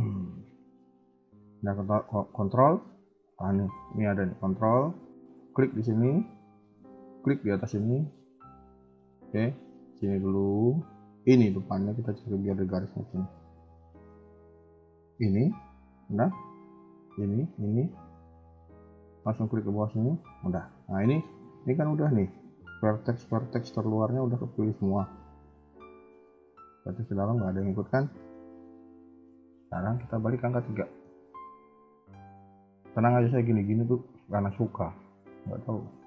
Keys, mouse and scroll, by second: 5.3 ctrl+click, 9.1 ctrl+z, 9.8 click, 11.3 ctrl+click, 14.9 ctrl+click, 20.5 middle click, 28.5 middle click, 29.6 KP_1, 30.0 KP_3, 30.7 shift+middle click, 32.3-33.9 typing, 34.5 scroll down 1, 35.2 KP_1, 35.4 KP_3.